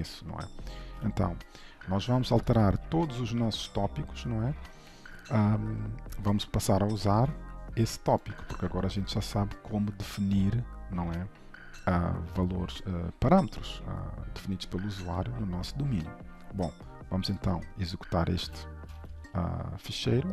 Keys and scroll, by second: 0.0 ctrl+z, 0.8 ctrl+s, 7.2 ctrl+c, 8.8 ctrl+s, 18.6 alt+shift+F10.